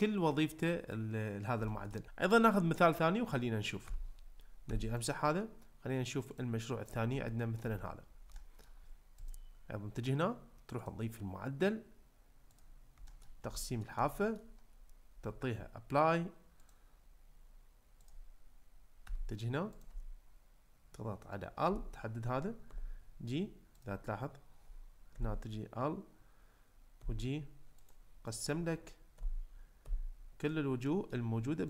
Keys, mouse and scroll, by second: 1.7 shift+middle click, 3.9 Tab, 4.7 x, 6.3 click, 7.3 shift+middle drag, 8.3-8.7 shift+middle drag, 10.8-12.6 drag, 13.1 shift+middle click, 13.5 ctrl+middle click, 14.2 shift+middle click, 16.6-18.1 drag, 19.1 Tab, 19.8 click, 21.6 l, 22.7 g, 23.8 click, 25.1 l, 27.0 g, 29.2 l, 29.8 g, 30.4 click, 30.9 middle click.